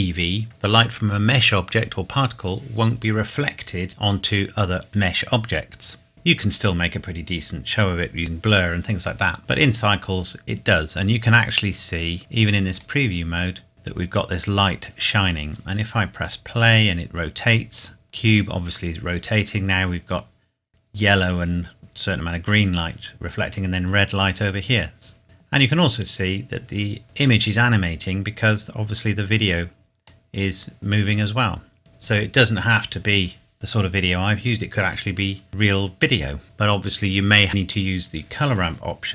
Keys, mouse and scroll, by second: 9.4 click, 11.5 scroll up 1, 12.8 click, 13.7-14.6 scroll up 1, 16.3 click, 25.2 click, 25.7-26.1 scroll down 1, 28.5 click.